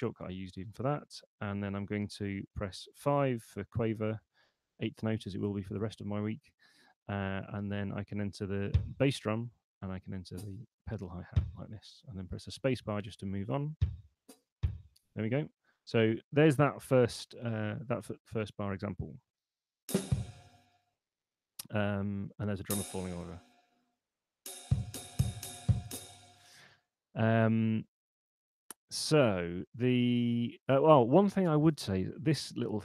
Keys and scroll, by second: 1.6 5, 3.6 space, 12.4 space, 15.8 Escape, 18.8 p, 20.8 space, 23.4 p, 25.8 space.